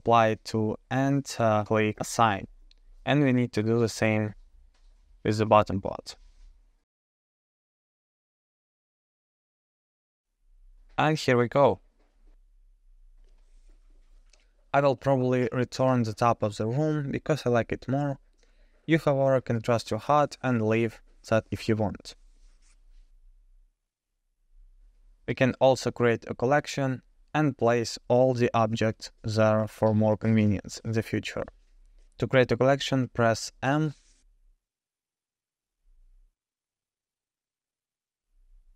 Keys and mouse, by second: 1.3 click, 3.6 Tab, 4.3 click, 8.0 click, 8.1 Tab, 10.1 Tab, 10.5 click, 12.5 middle click, 13.2 KP_0, 13.2 drag, 14.0 Tab, 14.2-14.7 drag, 15.9 x, 17.6 middle click, 18.4 middle click, 20.0 2, 20.5 alt+click, 21.1 f, 23.1 Tab, 23.1 KP_0, 25.9 KP_0, 26.7-27.0 drag, 31.1 m, 33.9 o.